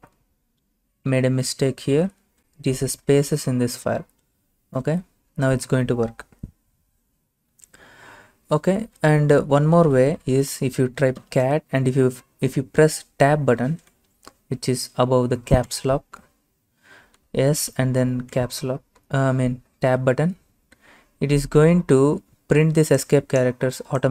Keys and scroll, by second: 0.1 Left, 0.2-3.1 Left, 3.1 typing, 4.8 Return, 9.6-11.2 typing, 15.7 Tab, 17.7 typing, 18.4 Tab.